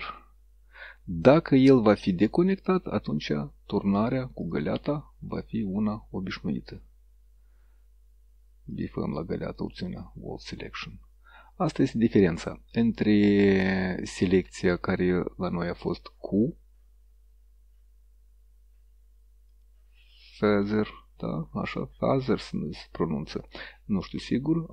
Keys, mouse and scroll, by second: 2.6 click, 4.5 click, 5.4 click, 8.7 click, 9.7 click, 13.7 click, 16.0 click, 19.6 click, 23.6 click, 24.1 click.